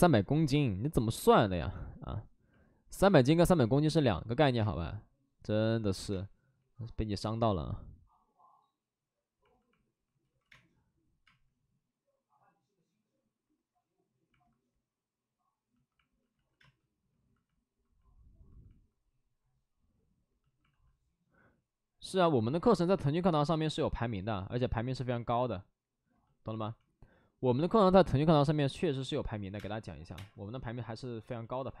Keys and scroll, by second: 0.7 b, 3.0 space, 4.5 space, 6.0 space, 10.1 ctrl+z, 10.4 space, 11.1 space, 14.9 space, 16.2 ctrl+z, 16.5 space, 20.6 alt+s, 24.5 alt+s, 29.3 3, 29.4 space, 29.9 3, 30.0 space.